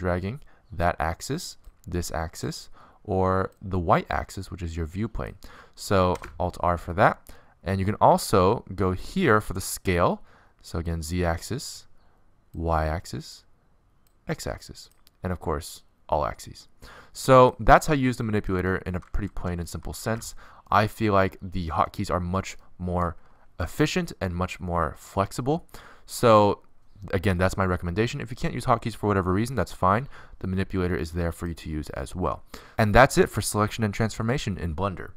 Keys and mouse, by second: 0.1-1.9 middle drag, 3.5 middle click, 3.9 click, 6.0-7.9 middle drag, 8.2 alt+r, 11.0 click, 16.1 alt+s, 18.1 middle click, 18.4 click, 19.5 alt+s, 23.9-26.0 middle drag, 27.0 click, 27.9-30.0 middle drag.